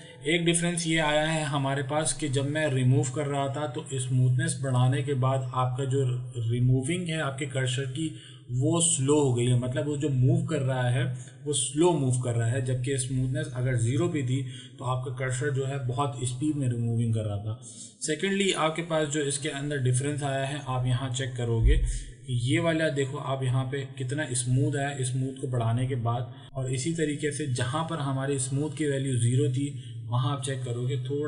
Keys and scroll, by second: 21.7 m.